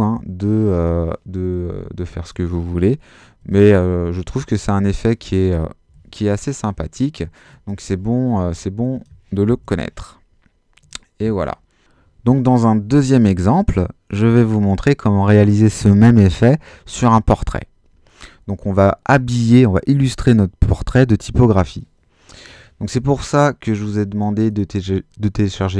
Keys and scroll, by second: 3.1-3.9 typing, 5.9 super+z, 9.3-10.1 typing.